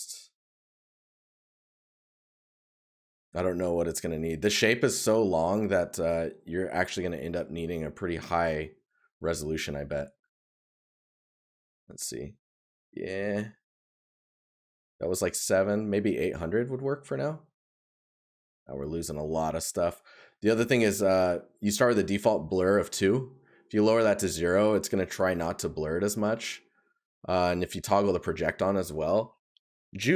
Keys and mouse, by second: 11.0 right click, 17.5 right click.